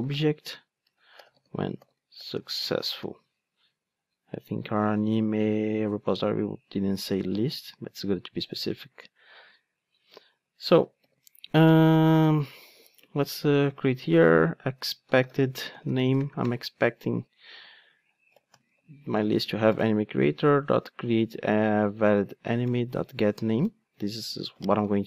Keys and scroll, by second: 9.3 Tab, 19.6 Return, 24.8 alt+super+l.